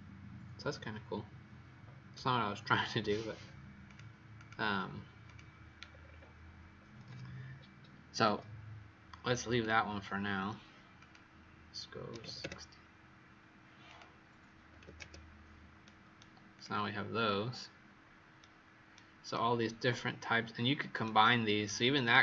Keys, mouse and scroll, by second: 3.2-3.8 scroll up 1, 3.8 click, 3.8-4.3 scroll up 3, 4.3 click, 5.2 click, 5.8-6.7 scroll down 6, 7.5-8.1 scroll down 1, 8.1 Escape, 9.4 click, 12.1 KP_6, 12.1 KP_0, 12.4 KP_Enter, 13.8 click, 14.6 KP_5, 14.7 KP_0, 14.9 KP_Enter, 15.7 right click, 16.5 click, 17.1-17.8 scroll down 1, 17.8-18.3 scroll down 3, 19.2 right click.